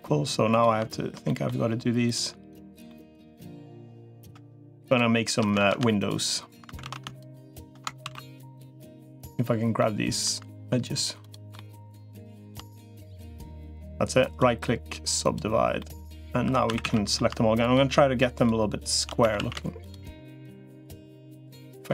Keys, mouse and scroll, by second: 0.3 click, 1.0 middle click, 2.7 middle click, 5.5 ctrl+z, 6.7 ctrl+z, 7.9 ctrl+z, 7.9-9.0 ctrl+middle drag, 9.6 middle click, 11.3 middle click, 12.7 middle click, 14.1-15.1 right drag, 15.6 middle click, 16.3 2, 16.5 a, 16.7 middle click, 16.7 a, 19.1 a.